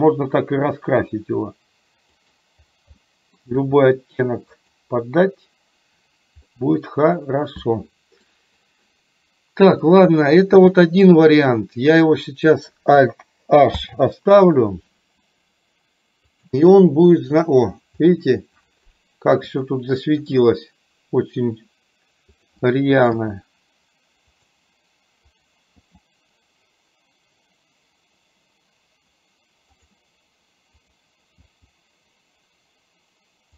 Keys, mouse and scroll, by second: 3.1 middle click, 3.6 g, 6.6-8.4 middle drag, 13.9 alt+h, 19.9 shift+middle click, 22.4 click, 23.4 g, 25.5 click, 26.0 g, 30.9 click, 31.6 g.